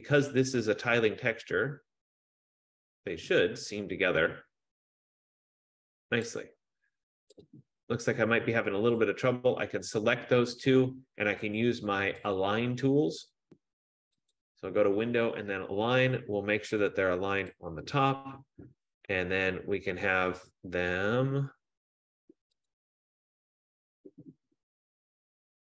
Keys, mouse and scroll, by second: 6.4 click, 7.5 click, 9.1 click, 12.1 F15, 12.7 click, 14.5 click, 17.8 click, 23.0 click.